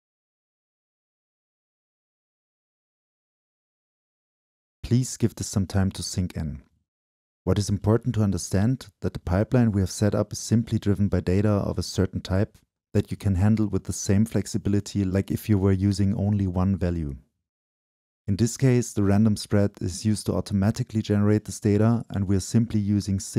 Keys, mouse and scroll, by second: 1.3-2.1 right drag, 2.7-4.5 right drag, 2.7 scroll down 2, 3.4-4.0 scroll up 2, 7.5-10.1 drag, 10.1 scroll down 2, 10.2-13.3 drag, 13.3 Delete, 14.0-14.5 drag, 14.5 right click, 14.8-15.3 scroll up 2, 15.3-15.8 scroll up 1, 15.8 right click, 16.6-18.3 right drag, 20.7-23.3 right drag, 23.3 click.